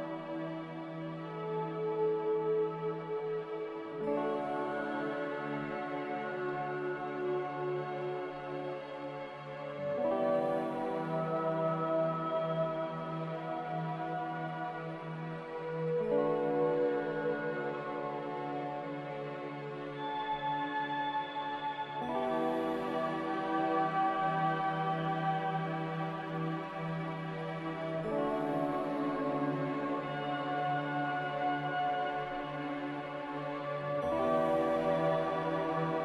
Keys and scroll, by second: 10.5 typing, 11.1 Return, 15.7-16.0 typing, 18.5 a, 19.1 ctrl+c, 19.3 ctrl+v, 24.3 ctrl+c, 24.5 ctrl+v, 26.6 typing, 27.0 Return, 31.9 n, 32.8 m.